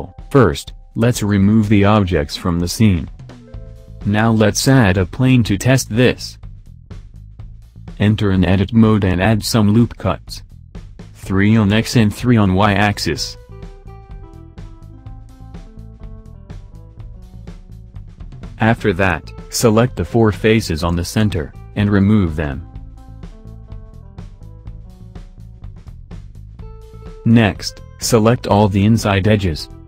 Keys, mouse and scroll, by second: 1.0 shift+a, 4.0 s, 4.0 KP_7, 5.2-6.5 scroll up 5, 6.5-7.0 scroll up 2, 7.2 Tab, 8.8 ctrl+r, 14.1 ctrl+r, 17.1 c, 18.8 click, 19.6 click, 21.8 click, 22.3 shift+click, 22.6 shift+click, 23.0 shift+click, 23.5 shift+click, 24.6 Delete, 27.5 click, 29.2 middle click.